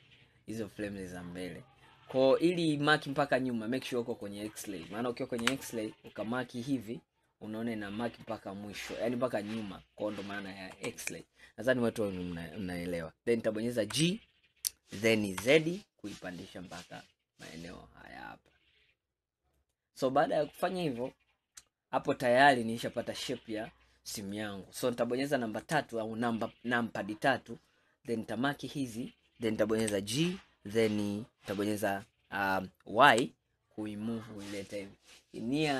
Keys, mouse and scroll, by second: 4.2-5.5 drag, 5.5 KP_1, 6.2 click, 7.3-10.4 middle drag, 10.8 KP_1, 11.3 scroll up 2, 14.0 g, 20.3-20.9 scroll down 2, 20.9-24.0 middle drag, 25.7 KP_3, 27.7 click, 29.9 g.